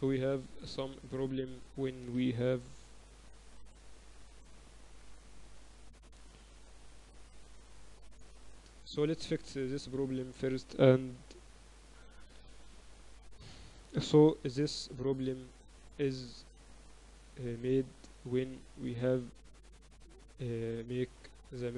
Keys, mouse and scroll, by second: 0.0 ctrl+z, 0.2 ctrl+z, 0.4 ctrl+z, 0.6 ctrl+z, 0.8 ctrl+z, 1.0 ctrl+z, 1.8 right click, 3.3 KP_1, 6.4-8.4 typing, 9.7 ctrl+z, 10.9 middle click, 11.0-15.2 typing, 16.3-18.8 drag, 18.8 middle click, 20.4-21.0 typing.